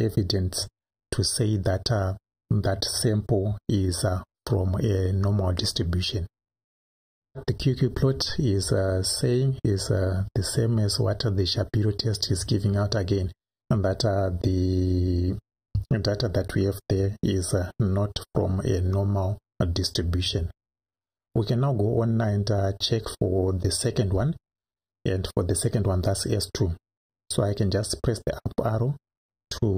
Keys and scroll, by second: 28.0 Up, 29.4 Up.